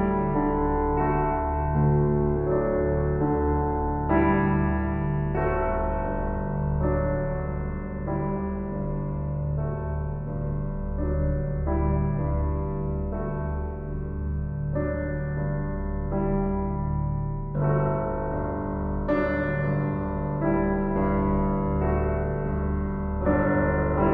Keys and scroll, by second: 1.1 ctrl+z, 3.6 shift+s, 19.1 shift+s, 21.4 s.